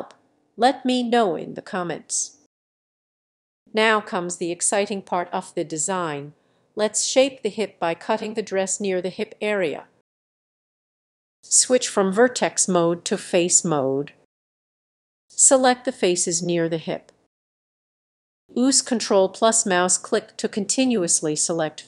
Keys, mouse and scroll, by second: 0.1 middle click, 0.4 click, 0.6 g, 0.7 click, 1.0 g, 1.2 click, 1.4 g, 1.6 click, 1.7 middle click, 1.8 g, 2.0 click, 2.4 click, 2.8 middle click, 3.3 click, 3.4 middle click, 3.6 click, 3.6 g, 5.2 click, 5.3 middle click, 5.8-8.3 drag, 8.3-10.3 middle drag, 11.9-14.8 drag, 14.9-16.2 drag, 16.2 middle click, 17.8-20.8 drag, 21.1 click.